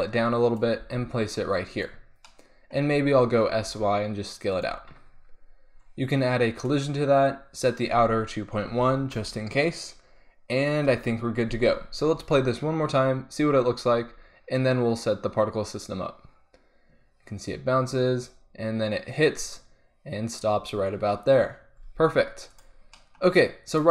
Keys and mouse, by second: 0.9 g, 3.4 s, 6.5-9.5 drag, 9.5-10.8 middle drag, 10.8 KP_1, 12.3 alt+a, 21.9 alt+a, 22.5-23.9 drag.